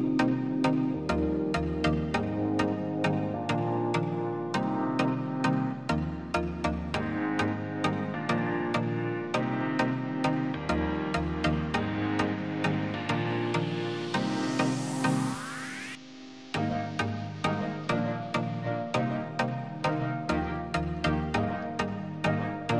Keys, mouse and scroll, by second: 6.6 middle click, 7.7 alt+w, 8.9 middle click, 9.5 alt+w, 10.4 shift+f, 11.6 shift+f, 12.8 F3, 15.1 F3, 17.2 F3.